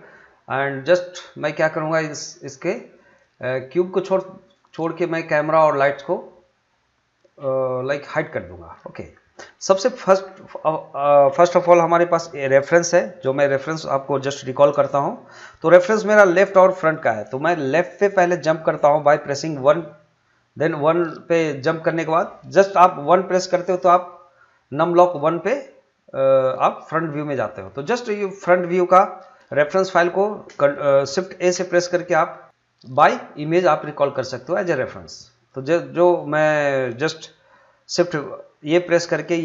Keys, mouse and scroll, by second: 2.5 click, 8.1 middle click, 8.7-9.1 scroll down 2, 9.5 scroll up 2, 9.8 middle click, 14.9 middle click, 20.9-24.3 middle drag, 29.4 shift+Num_Lock, 31.4 shift+a.